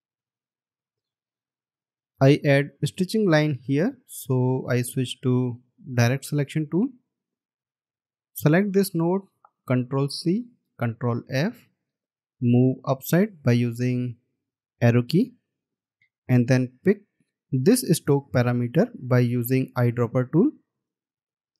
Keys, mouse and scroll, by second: 0.4-1.0 alt+scroll down 2, 2.2-2.8 alt+scroll up 1, 4.2-4.6 alt+scroll up 1, 10.3 ctrl+c, 11.0 ctrl+f, 16.6-17.1 alt+scroll down 1, 21.4 alt+scroll up 1.